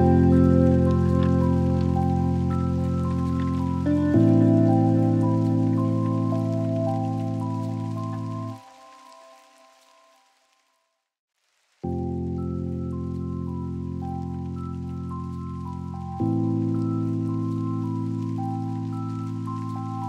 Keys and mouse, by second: 2.9 click, 7.1 click, 19.0 click.